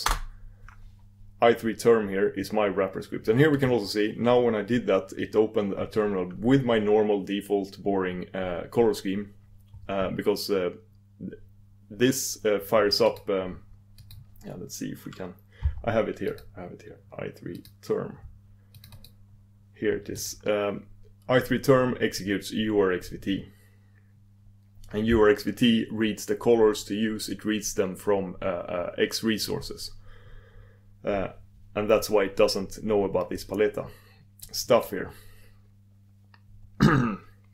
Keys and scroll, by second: 0.2 ctrl+super+Return, 20.5 ctrl+super+Return.